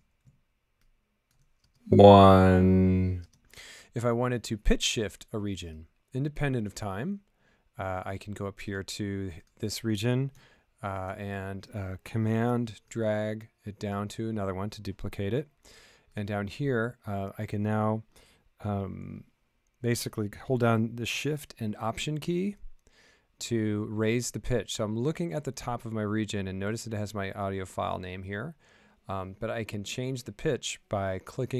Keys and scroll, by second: 1.6 space, 3.2 space.